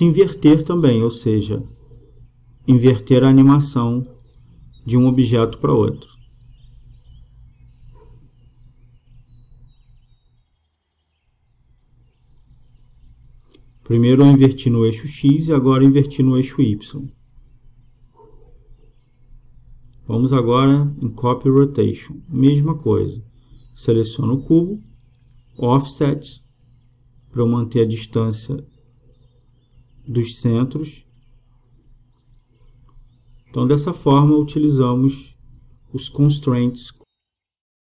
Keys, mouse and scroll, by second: 0.5-3.8 drag, 11.1-12.9 drag, 13.1-16.3 drag, 19.6-21.3 drag, 23.2-24.9 drag, 26.8-31.7 drag.